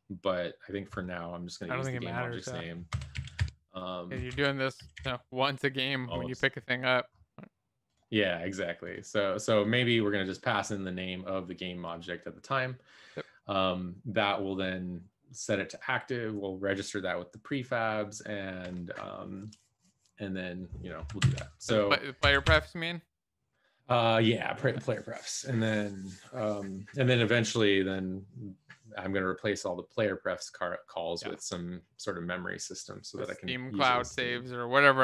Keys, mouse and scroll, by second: 3.1-5.6 typing, 21.9 ctrl+., 22.4 Down, 22.4 Up.